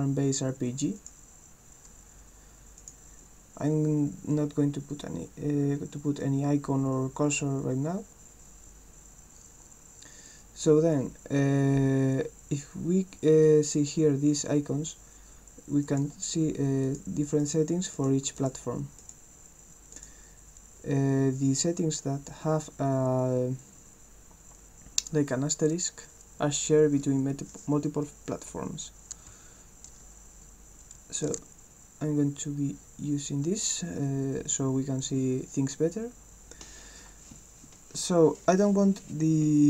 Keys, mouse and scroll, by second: 1.0 click, 2.8 click, 15.8 click, 16.8 click, 17.4 click, 17.9 click, 18.4 click, 19.0 click, 19.9 click.